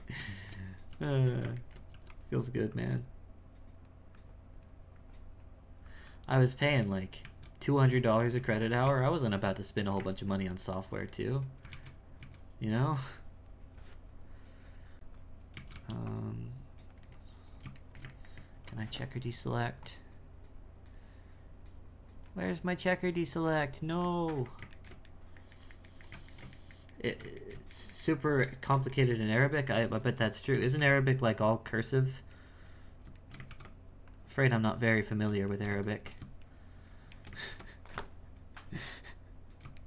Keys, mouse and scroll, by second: 0.9 f, 1.6 ctrl+middle click, 2.8-7.2 drag, 7.2 z, 8.4 z, 8.9 Tab, 10.3-11.7 ctrl+middle drag, 11.7 alt+a, 12.2 a, 15.5 alt+a, 15.7 c, 17.8-19.8 ctrl+shift+middle drag, 19.8-22.9 drag, 24.8-29.8 ctrl+shift+middle drag, 29.8 right click, 30.2 shift+right click, 30.8 ctrl+x, 32.4 right click, 33.2 shift+right click, 33.5 ctrl+x, 34.6 right click, 35.5 shift+right click, 36.5 shift+right click, 37.2 shift+middle click, 37.5 ctrl+x, 38.9 right click, 39.7 shift+right click.